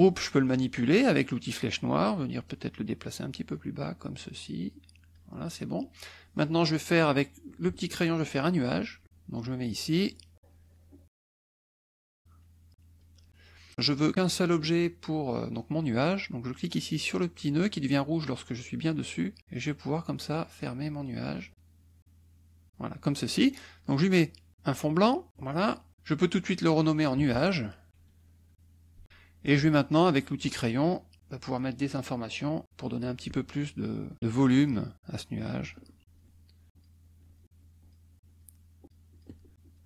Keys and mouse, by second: 1.9-5.3 drag, 7.5 click, 9.5-13.1 drag, 18.8-22.9 drag, 26.6 click, 27.9 a, 30.4 click, 32.6 middle click, 34.1 click, 34.3 shift+click, 34.8 shift+click, 35.2 shift+click, 35.6 shift+click, 36.0 shift+click, 36.7 shift+click, 37.1 shift+click, 37.6 shift+click, 38.2 shift+click, 38.8 shift+click, 39.5 shift+click.